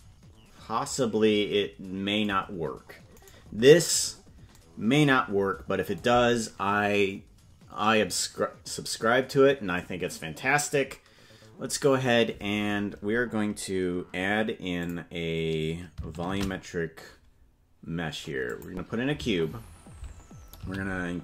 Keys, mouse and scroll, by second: 0.2 KP_Decimal, 3.6 right click, 4.4-5.0 scroll down 3, 14.8 click, 16.5 shift+a, 20.9 s.